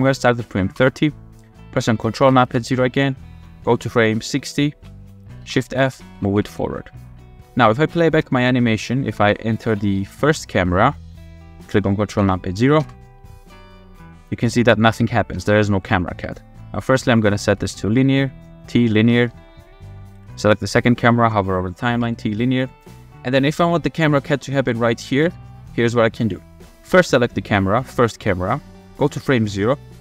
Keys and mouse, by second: 0.8 i, 2.4 ctrl+KP_0, 4.5 click, 5.4 shift+f, 6.1 w, 6.3 w, 6.5-7.2 drag, 7.8 click, 8.2 click, 8.8 shift+middle click, 8.9 shift+click, 9.1 shift+middle click, 10.0 shift+drag, 10.3 click, 11.1 click, 12.2 ctrl+KP_0, 12.8 space, 15.3 space, 15.6 click, 16.5 f, 17.5 t, 19.1 shift+click, 19.6 click, 20.0 shift+click, 21.9 t, 23.1-23.5 drag, 24.9 click, 25.6 shift+middle drag, 26.9 click, 29.0 click.